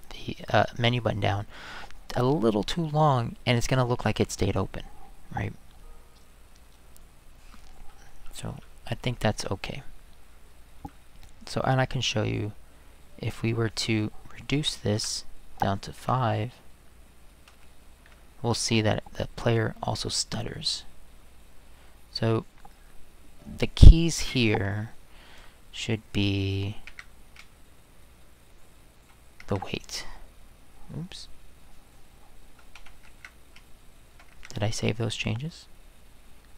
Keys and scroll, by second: 15.0 space, 16.0 5, 17.5 space, 18.0 5, 24.2 Return, 25.8-26.4 Right, 26.9 Escape, 27.4-29.0 Right, 29.4 Right, 29.4 Escape, 32.8 Right, 33.1 Escape, 33.5 Right, 34.1 Right, 34.3 Right, 34.3 Escape.